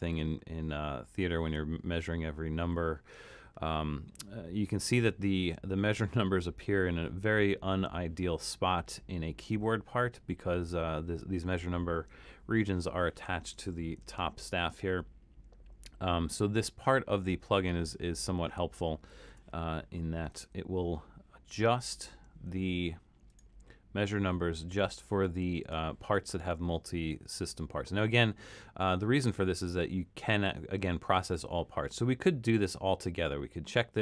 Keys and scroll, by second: 0.1 super+=, 1.3 super+=, 14.2 super+-, 14.9 super+-, 19.3 super+a.